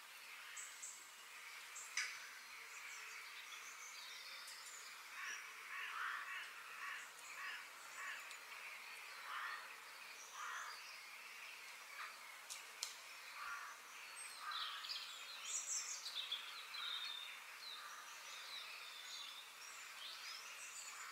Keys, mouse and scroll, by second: 1.4-2.8 middle drag, 2.8 click, 3.5 f, 5.8 KP_3, 6.6-8.1 shift+middle drag, 8.1 shift+d, 19.1 shift+d.